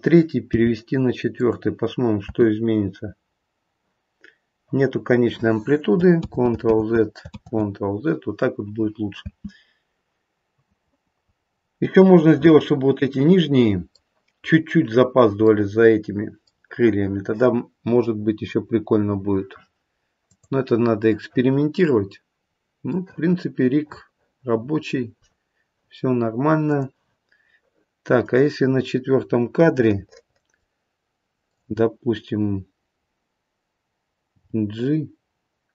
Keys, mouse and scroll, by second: 0.4 g, 2.2 space, 6.2 ctrl+z, 6.7 ctrl+z, 7.4 ctrl+z, 9.2 space, 11.5-11.9 scroll up 2, 11.9 middle click, 12.0 middle click, 12.2 middle click, 13.0 middle click, 15.4 middle click, 15.6 middle click, 18.5-18.9 scroll down 1, 20.2 click, 21.0 middle click, 22.4-23.3 scroll down 2, 22.9 middle click, 25.8-26.6 scroll down 3, 26.6 click, 28.2 click, 29.6 middle click, 31.4 click, 34.3 g.